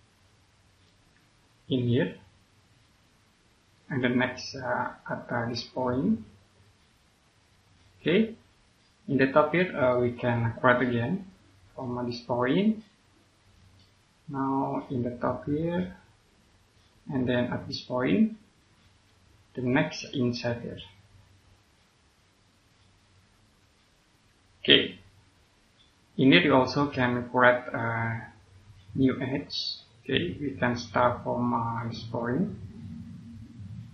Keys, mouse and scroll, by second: 6.4 click, 7.8 scroll down 1, 8.6 click, 9.8 middle click, 10.5-10.9 scroll up 1, 11.2 click, 13.8 scroll up 1, 14.6 click, 19.3 scroll down 1, 19.6 middle click, 23.0 click, 24.5 scroll down 1, 25.6 middle click, 26.2-26.5 scroll up 1, 26.5 click, 27.6 scroll up 1.